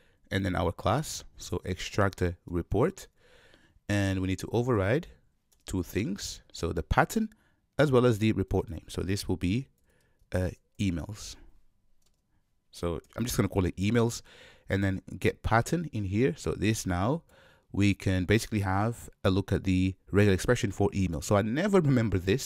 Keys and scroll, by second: 4.1 alt+Return.